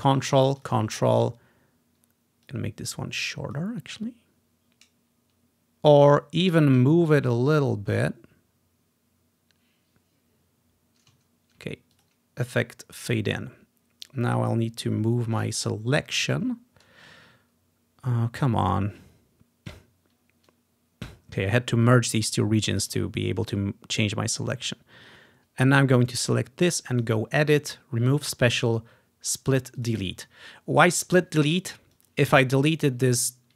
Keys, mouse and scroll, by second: 0.1 ctrl+click, 0.7 ctrl+click, 1.2-3.7 ctrl+drag, 6.6-7.0 scroll up 2, 11.4-12.0 scroll down 1, 12.0-15.2 drag, 15.9-17.1 ctrl+scroll up 3, 19.8 click, 20.6-23.2 drag, 23.2-24.8 scroll down 2, 24.9 click, 27.0 click, 29.9 click, 30.7 click, 32.1-33.5 drag, 33.2-33.5 ctrl+scroll down 2.